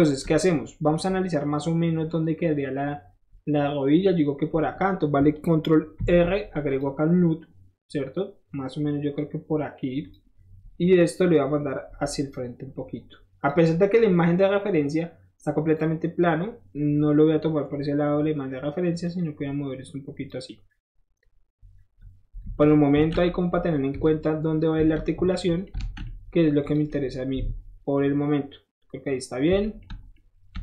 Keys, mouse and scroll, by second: 0.2 scroll down 1, 0.5-2.3 middle drag, 2.5 middle click, 4.1 scroll up 1, 4.2 middle click, 6.0 ctrl+r, 6.7 click, 10.0 click, 10.5 middle click, 11.2-13.5 drag, 13.5 middle click, 13.8 middle click, 14.1 middle click, 14.5 middle click, 14.7-15.7 middle drag, 15.7 middle click, 16.2-17.9 middle drag, 18.0 middle click, 19.0-20.3 drag, 20.7 middle click, 22.0 middle click, 22.4 alt+z, 22.9 alt+z, 23.9 Escape, 25.3-25.7 middle drag, 25.8 alt+z, 26.1-26.5 middle drag, 26.6 click, 26.9-29.8 middle drag, 29.8 shift+middle drag, 30.1-30.6 shift+middle drag.